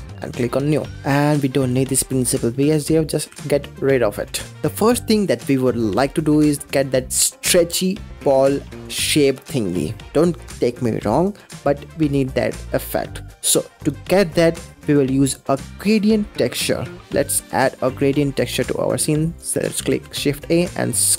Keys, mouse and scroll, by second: 0.3 click, 0.9 middle drag, 1.1 scroll up 3, 1.6 click, 3.3 x, 12.6 3, 16.7 middle click, 17.5 click, 17.7 shift+a, 19.8 shift+a.